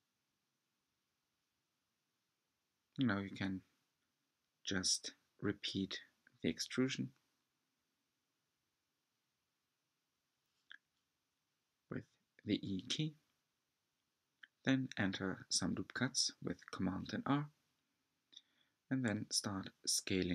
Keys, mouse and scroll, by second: 3.6 scroll down 3, 3.8 shift+middle click, 4.5 e, 9.1 r, 9.7 s, 14.1 r, 14.3 right click, 15.2 r, 16.0 alt+shift+click, 16.6 s.